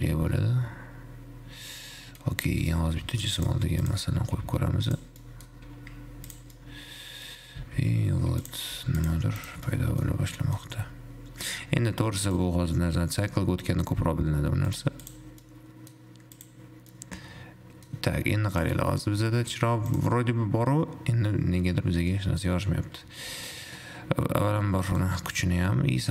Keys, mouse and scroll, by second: 3.0 shift+a, 4.5 g, 5.6 middle click, 5.7-6.1 scroll down 1, 6.1 g, 7.1-7.7 middle drag, 7.7 g, 10.0 middle click, 10.3 scroll up 2, 10.6-12.5 middle drag, 12.5-15.7 drag, 15.7-16.6 middle drag, 16.6 click, 17.2-18.8 middle drag, 18.8 click, 20.1 click, 21.1-22.1 scroll down 8, 22.1 scroll up 5, 22.5 middle click, 22.7-23.7 scroll up 2, 23.7-25.7 drag, 25.7-26.1 middle drag.